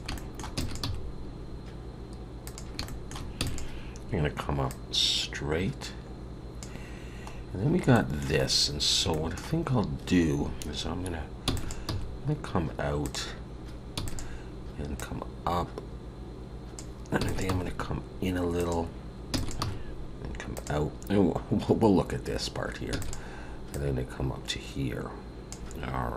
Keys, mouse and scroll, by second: 0.1 shift+middle click, 0.5 e, 0.8 g, 2.8 shift+middle click, 3.4 e, 4.7 click, 7.3 scroll down 2, 7.9 shift+middle click, 8.4 scroll up 2, 25.9 click, 25.9-26.1 scroll down 6, 25.9 e.